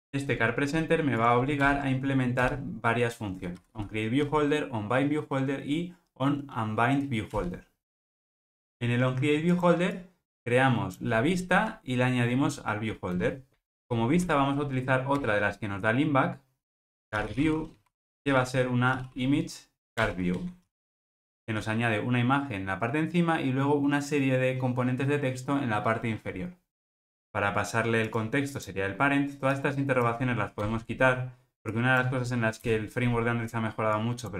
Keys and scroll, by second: 1.7 alt+Return, 15.2 Return, 20.1 Return, 27.1 Escape.